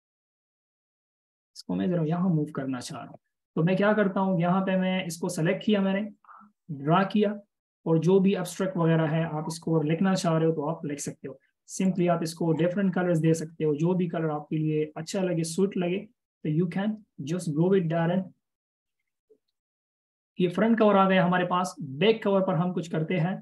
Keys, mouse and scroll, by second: 19.3-20.0 alt+shift+scroll down 1, 22.1-23.0 alt+shift+scroll up 1.